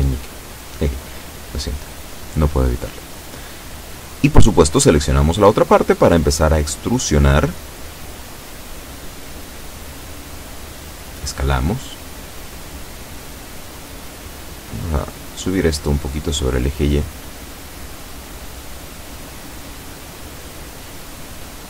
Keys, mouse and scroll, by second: 0.9-2.0 drag, 3.1 b, 3.6 click, 4.8 e, 6.4 click, 7.0-8.2 drag, 9.6 s, 11.3 click, 11.9 a, 12.3 b, 12.8 click, 15.0-17.2 drag, 18.0-20.1 drag, 20.6 b, 21.2 click.